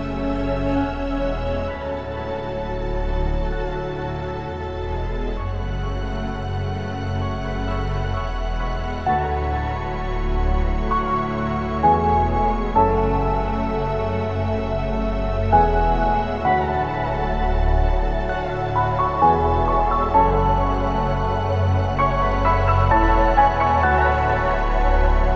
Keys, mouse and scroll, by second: 0.6 b, 5.7 b, 7.9 b, 12.6 b, 15.1 b, 17.6 b, 20.3 b, 23.5 s, 24.0 shift+z.